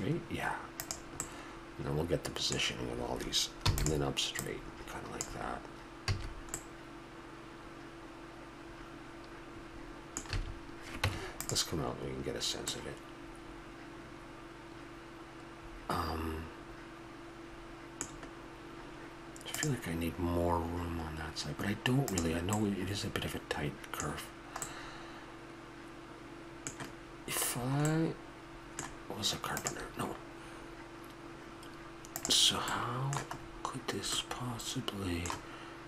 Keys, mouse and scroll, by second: 1.2-2.2 middle drag, 3.7 e, 4.4-5.9 drag, 6.0 a, 8.6 middle click, 10.3 a, 11.0 Tab, 12.7-13.7 middle drag, 14.6 middle click, 15.2 middle click, 15.5 middle drag, 22.6-26.3 middle drag, 27.6-29.7 middle drag, 32.7-34.9 middle drag.